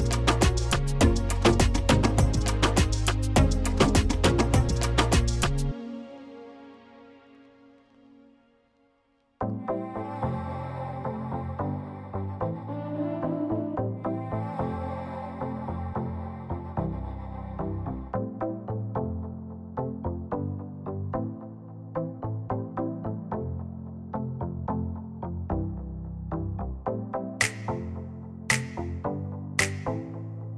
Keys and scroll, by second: 1.0 ctrl+d, 6.5 Delete, 26.2 ctrl+a, 26.8-28.1 typing, 30.0 typing.